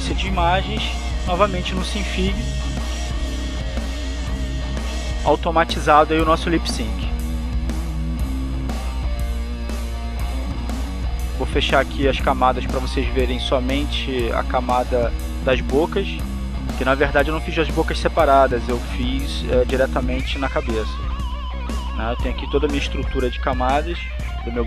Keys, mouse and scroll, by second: 1.1 Tab, 1.8 Tab, 3.2 click, 4.3 click, 7.5 click, 8.5 click, 11.3 click, 12.0 click, 13.1 click, 13.8 click, 14.9 click, 15.7 click, 17.5 click, 19.2 click, 21.5 click, 23.1 click, 23.9 click.